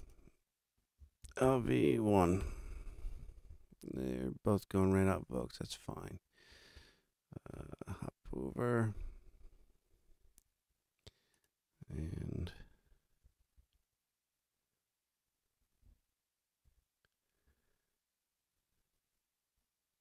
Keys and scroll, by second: 1.0-2.1 typing, 2.4 Return, 12.7 t, 16.6 r.